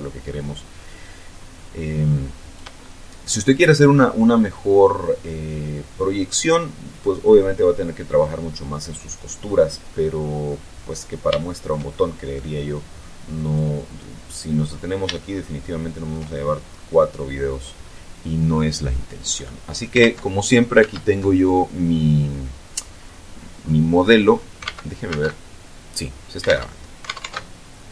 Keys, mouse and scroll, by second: 2.8-3.8 shift+middle drag, 8.4-9.7 middle drag, 9.7-10.9 scroll up 2, 10.9-11.3 scroll down 1, 11.3 shift+middle click, 11.8 shift+middle click, 13.4 click, 14.6 scroll down 2, 15.1-16.2 shift+middle drag, 16.2-17.0 shift+scroll up 3, 17.0 scroll down 2, 17.6 scroll down 2, 18.3-19.0 scroll up 2, 19.9 alt+Tab, 20.7 alt+Tab, 22.8-23.6 scroll down 2, 23.6-24.4 scroll up 4, 24.5 alt+Tab, 26.4 alt+Tab.